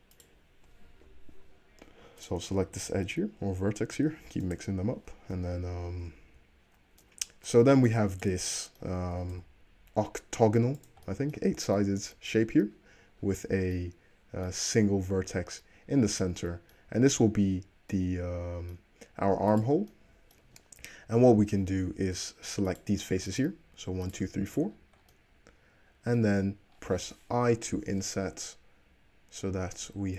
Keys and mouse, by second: 0.1 middle click, 0.2 click, 0.3-2.3 middle drag, 2.3 click, 2.4-7.4 middle drag, 2.9 g, 5.4 alt+z, 6.2 z, 7.6 middle click, 8.3 click, 8.4-17.4 middle drag, 9.2 g, 17.4 click, 17.5-19.7 middle drag, 19.7 click, 19.8-22.8 middle drag, 22.1 3, 22.8 click, 22.9-23.4 shift+middle drag, 23.4 shift+click, 23.5-24.2 shift+middle drag, 24.2 shift+click, 24.2-24.7 shift+middle drag, 24.7 shift+click, 24.7-30.1 middle drag, 27.5 |.